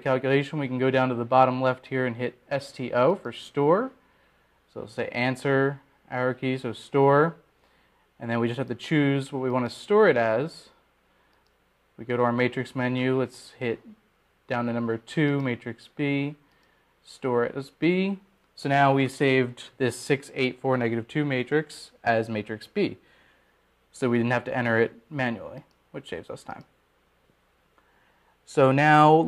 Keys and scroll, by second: 14.3 Down, 19.1 Return, 19.4 Return.